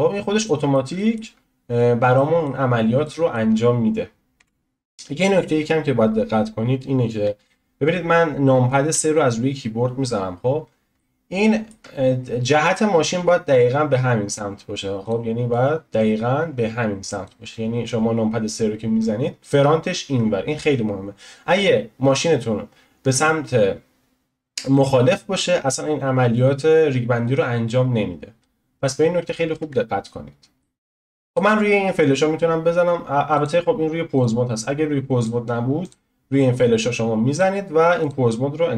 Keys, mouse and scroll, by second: 0.3 scroll down 1, 0.4-1.3 middle drag, 1.3 scroll up 2, 1.7-2.1 scroll down 1, 2.1-4.4 middle drag, 4.4 n, 4.5 n, 8.9 KP_3, 10.1-11.1 scroll up 6, 11.1-14.0 shift+middle drag, 15.0-18.5 drag, 29.6 ctrl+z, 30.6 middle click, 31.2-38.7 drag.